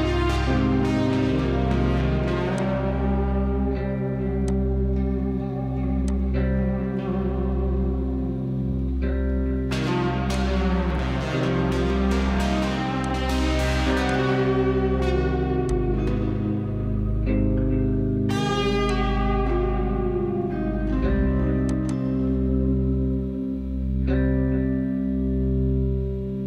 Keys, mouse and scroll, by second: 0.8-4.1 scroll down 10, 9.3 click, 10.2 click, 12.9-26.4 drag.